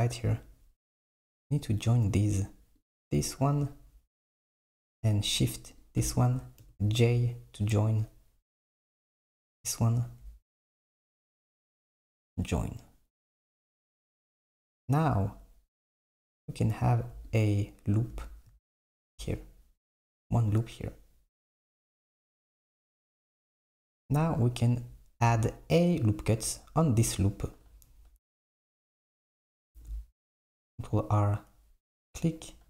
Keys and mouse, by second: 1.5-2.9 drag, 5.8 shift+click, 6.7 j, 9.0 click, 11.2 shift+click, 11.7 j, 13.6 s, 16.1-18.6 drag, 23.3 click, 29.7 r.